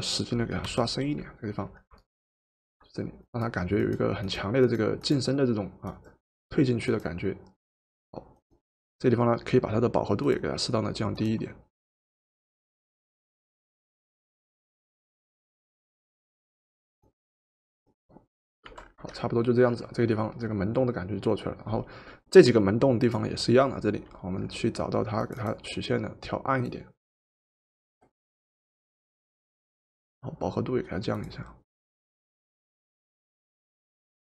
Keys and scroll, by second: 0.7 o, 18.7 v.